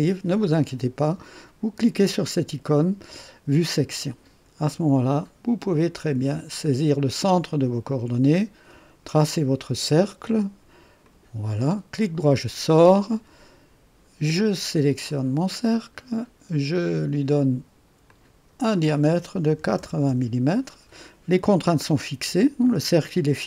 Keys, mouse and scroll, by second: 3.7 click, 7.5 click, 11.0 click, 12.0 right click, 15.0 click, 18.0 click, 19.4 KP_8, 19.7 KP_0, 20.1 KP_Enter.